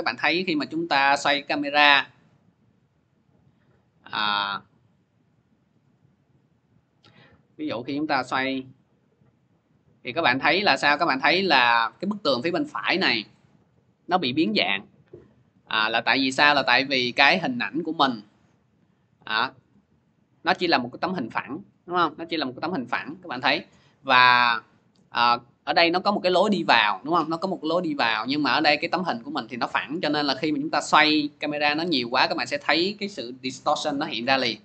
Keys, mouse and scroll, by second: 1.2-6.4 drag, 6.8-16.2 drag, 18.7-23.8 drag, 24.7-29.8 drag, 30.8-34.6 drag.